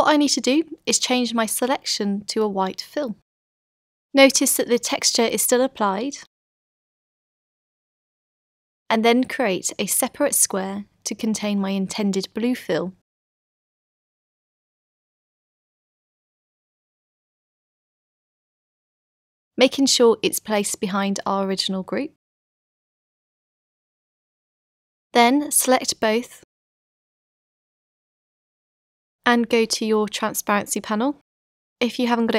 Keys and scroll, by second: 1.8 v, 20.0 v, 21.3 super+[, 26.4 super+a.